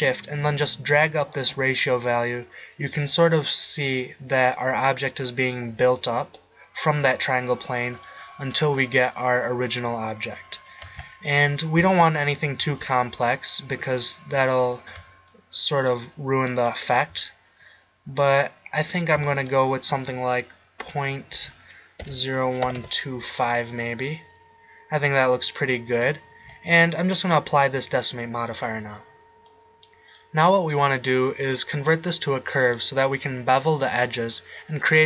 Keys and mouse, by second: 15.5-17.6 middle drag, 21.3-23.6 middle drag, 27.1-29.1 drag, 29.5 click, 29.7-31.8 middle drag.